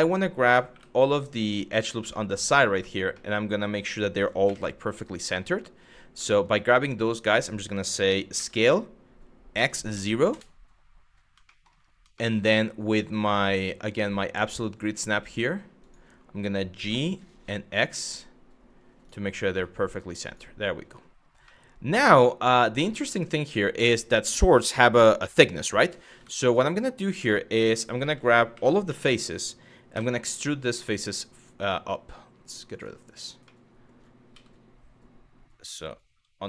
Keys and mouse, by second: 0.3 2, 1.0 alt+click, 1.8 shift+middle click, 2.5 middle click, 2.7 middle click, 4.1 KP_1, 5.9 middle click, 8.0 s, 9.2 x, 9.6 KP_0, 9.9 KP_Enter, 11.1 shift+middle click, 11.8 shift+middle click, 14.2 click, 15.4 click, 16.4 g, 17.1 x, 18.6 click, 19.9 click, 21.2 middle click, 22.6 middle click, 25.8 Tab, 26.3-26.7 middle drag, 27.3 Tab, 28.2 3, 28.5 a, 29.6 e, 32.3 click, 33.2 middle click, 34.0 g, 36.2 y.